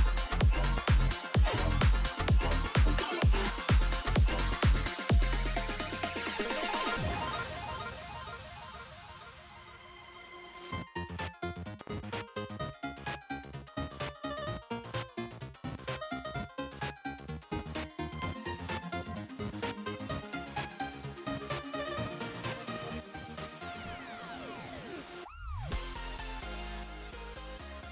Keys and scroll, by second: 5.3 ctrl+s.